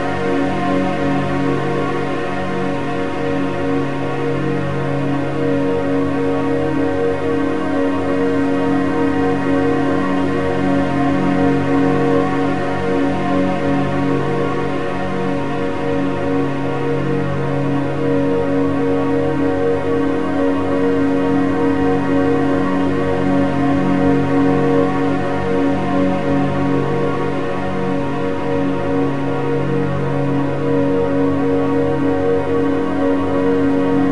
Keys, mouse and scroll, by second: 3.6-6.7 drag, 10.4 click, 12.8 click, 13.9 click, 15.0-18.0 drag, 20.0 click, 22.9 click, 25.2-28.3 drag.